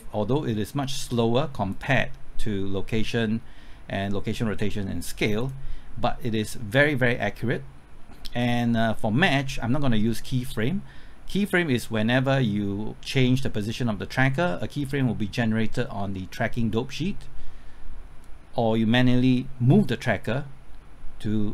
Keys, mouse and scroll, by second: 11.6 click.